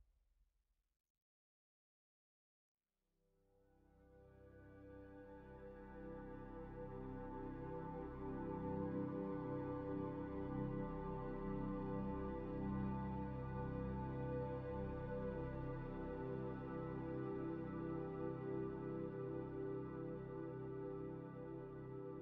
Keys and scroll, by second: 8.0 v.